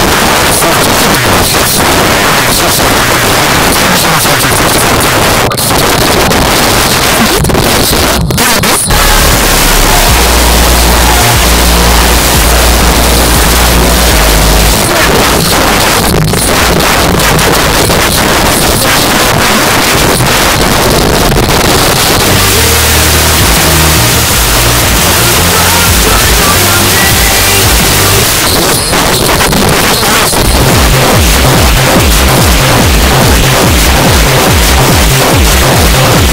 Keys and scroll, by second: 4.4 Down, 4.6 Down, 4.7 Down, 4.9 Down, 5.0 Down, 5.3 Down, 5.4 Down, 5.6 Down, 5.8 Down, 6.2 Down, 14.7 Page_Down, 28.2 Page_Down.